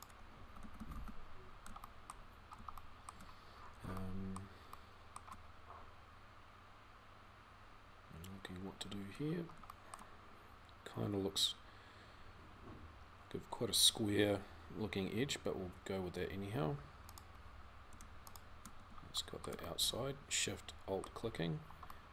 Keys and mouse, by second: 0.4 f, 0.6 f, 4.6-9.6 middle drag, 15.0-18.8 middle drag, 19.0-22.1 middle drag.